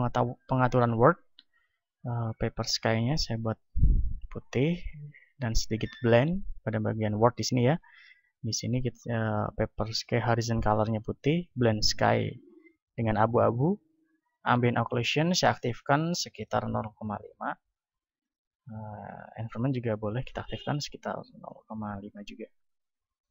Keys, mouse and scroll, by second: 2.5-4.5 drag, 5.0-6.8 drag, 10.7-12.7 drag, 14.3-16.8 drag, 17.2-23.3 drag.